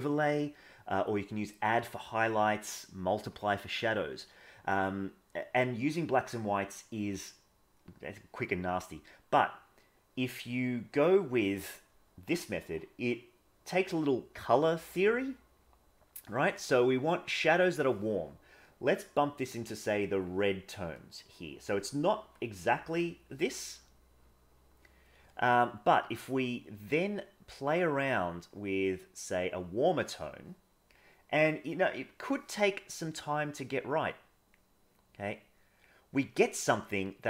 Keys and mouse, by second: 18.7-20.3 drag, 20.9-21.7 drag, 25.1 middle click, 26.2-27.7 drag, 28.6 click, 33.2-34.5 drag, 34.9 click.